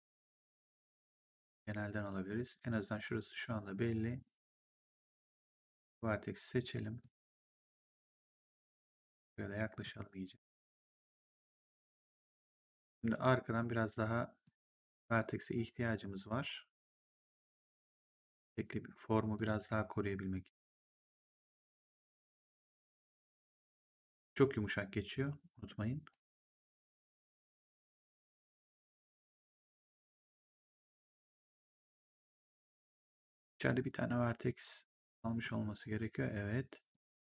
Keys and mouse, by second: 0.8 click, 4.5 click, 5.6 click, 6.9 click, 8.6 click, 9.8 click, 11.4 click, 13.5 click, 17.0 click, 19.2 click, 22.5 click, 23.8 click, 25.1 click, 26.6 click, 28.5 click, 30.0 click, 34.9 click, 36.8 click.